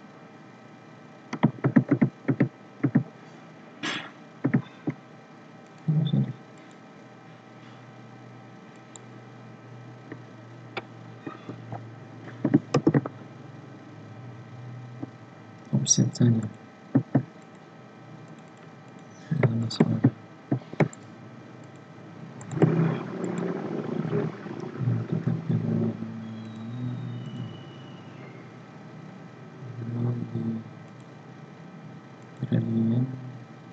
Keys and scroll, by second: 1.6 ctrl+z.